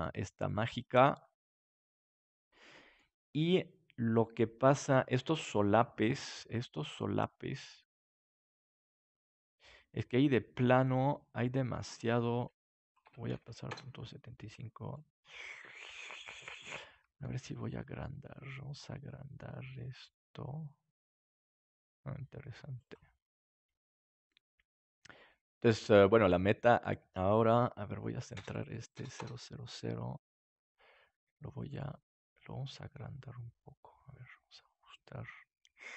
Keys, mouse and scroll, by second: 1.3-3.2 middle drag, 3.2 scroll up 1, 3.3-8.1 middle drag, 10.8-14.6 drag, 14.9-16.2 middle drag, 17.2 s, 22.8-23.9 drag, 23.5-25.1 middle drag, 26.8-28.5 right drag, 28.2-30.6 drag, 31.2 s.